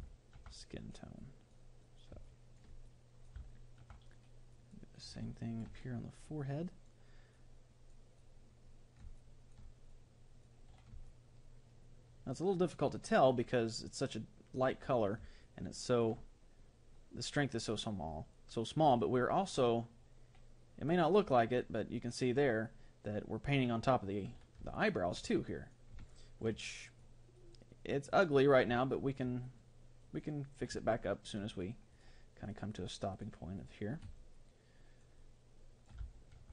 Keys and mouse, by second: 4.5 middle click, 5.1-9.9 drag, 9.2 middle click, 9.9 middle click, 10.5-11.7 drag, 10.7 middle click, 11.7-12.8 middle drag, 13.9-17.6 middle drag, 20.9-22.7 drag, 24.7-27.8 middle drag, 25.5-31.7 drag, 28.9-32.7 middle drag, 31.9-35.3 drag, 34.2-36.5 middle drag.